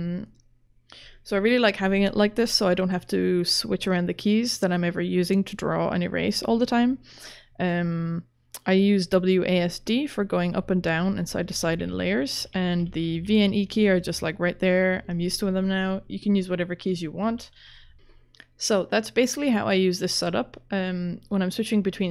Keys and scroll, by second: 10.1-13.6 typing, 17.0-18.3 typing.